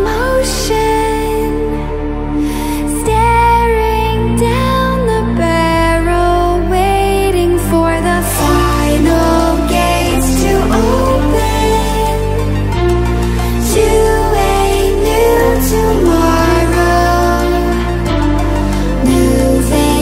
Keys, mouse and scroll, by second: 0.9-5.9 drag, 8.7 ctrl+alt+scroll down 1, 9.2 ctrl+alt+scroll up 1, 10.5 space, 10.7 click, 11.1-11.7 space, 12.1 ctrl+alt+scroll down 1, 14.8-15.4 click.